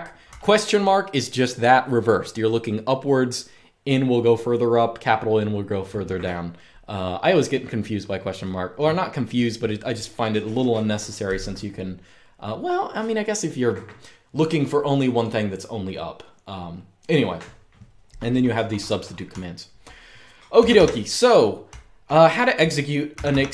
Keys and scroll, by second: 19.0-23.0 typing.